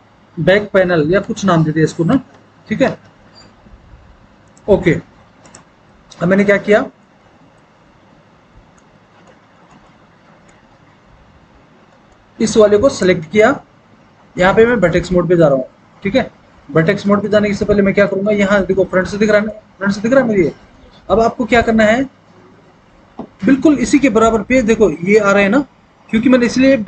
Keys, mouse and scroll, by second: 1.3-2.4 typing, 17.6 alt+w, 18.6 alt+w.